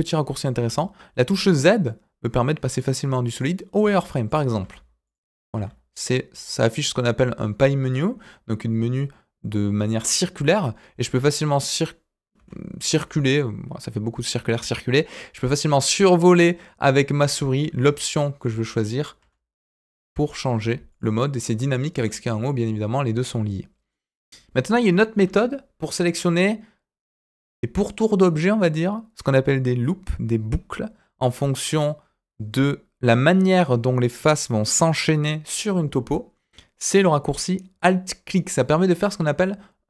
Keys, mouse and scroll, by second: 23.9 middle click, 24.2 click, 25.2 KP_1, 25.8-27.4 scroll up 2.